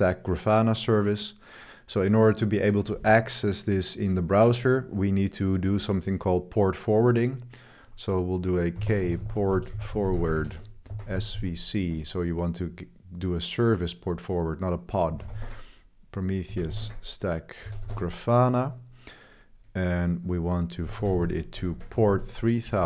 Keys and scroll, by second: 8.5-12.2 typing, 14.8-18.2 typing, 20.6-22.8 typing.